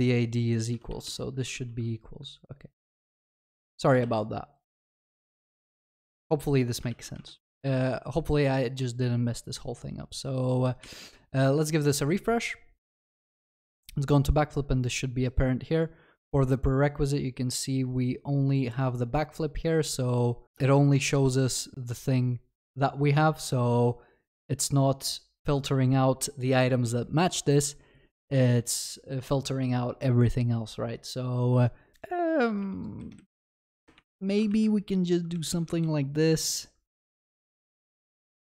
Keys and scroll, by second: 1.6 ctrl+s, 4.0 ctrl+s, 34.5 ctrl+s.